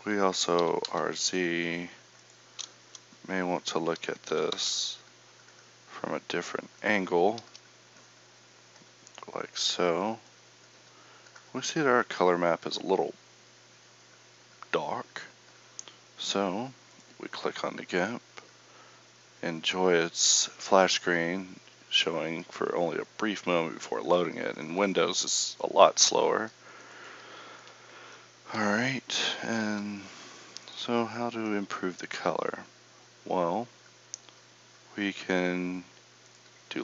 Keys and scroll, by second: 0.6 r, 2.8 KP_0, 4.4 r.